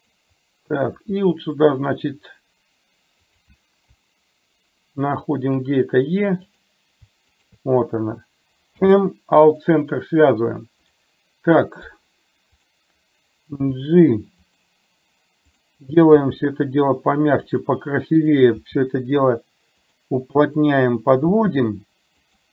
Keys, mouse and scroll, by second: 5.2 shift+click, 6.6 click, 8.8 m, 10.9 click, 12.6 click, 15.6 click, 16.1 g, 19.8 g.